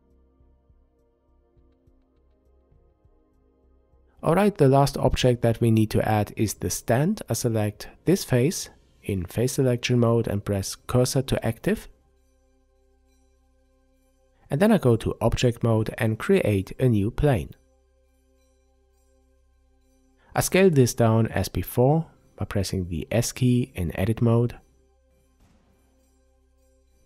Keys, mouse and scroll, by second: 1.5 Tab, 4.8 click, 5.8 click, 10.0 click, 13.4 Tab, 15.3 shift+a, 20.6 Tab, 21.7-25.7 middle drag, 23.5 s, 25.7 click, 26.4 s.